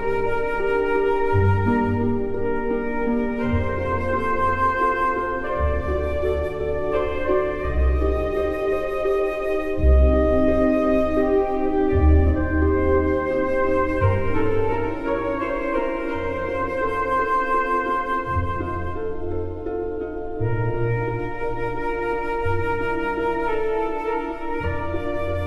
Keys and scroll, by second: 5.8 KP_1, 5.9 KP_8, 6.3 KP_0, 16.9 space.